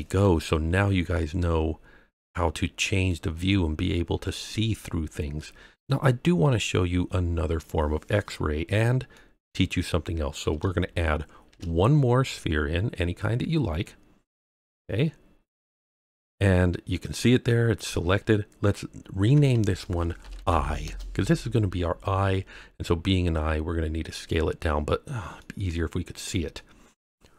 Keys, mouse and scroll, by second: 0.6 scroll up 2, 1.1-3.1 middle drag, 3.3-3.7 scroll down 2, 4.0-4.4 scroll up 2, 4.4 scroll down 1, 4.5 scroll down 1, 5.3-5.8 middle drag, 9.1-9.5 middle drag, 11.4 shift+a, 19.2 F2, 25.3-26.5 middle drag.